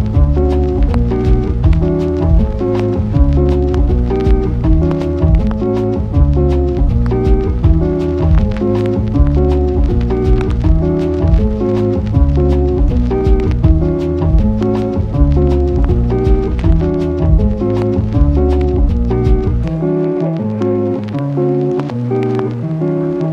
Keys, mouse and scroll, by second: 0.4 Return, 1.0 Return, 1.2 click, 1.7 Return, 2.3 Return, 3.0 Return, 3.1 click, 4.0 Return, 4.5 Return, 5.1 Return, 5.8 Return, 6.5 Return, 7.7 Return, 8.7 Return, 9.4 Return, 10.0 Return, 12.4 click, 20.6 click.